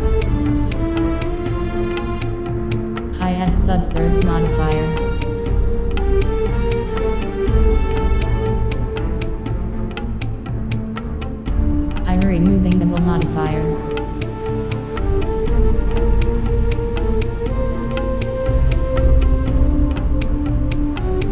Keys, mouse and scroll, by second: 1.6 click, 4.9 click, 5.3-5.8 middle drag, 6.2-12.6 middle drag, 8.3 Tab, 9.1 Tab, 9.9 click, 9.9 right click, 11.0 right click, 12.2 click, 12.7 click, 12.7-14.6 middle drag, 14.9-16.0 drag, 15.3-17.2 middle drag, 17.5 Tab, 17.7 middle click, 18.9-21.3 middle drag, 19.2 click.